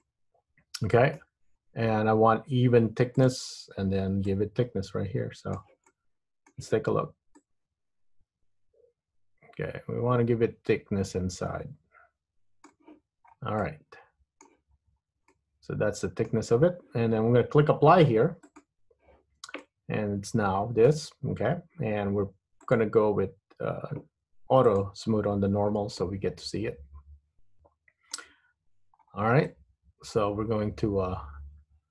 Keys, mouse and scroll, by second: 0.1 middle click, 1.6 scroll up 3, 3.3 click, 4.5 click, 6.0 middle click, 7.5 click, 13.4 scroll down 3, 13.7 middle click, 14.8-15.4 scroll up 3, 15.4 middle click, 18.5 click, 19.4 Tab, 19.7 middle click, 21.4 Tab, 22.7 click, 24.8 click, 25.8 scroll down 3, 26.1 middle click, 28.7-29.2 scroll up 2, 29.2 scroll down 1, 29.5 middle click.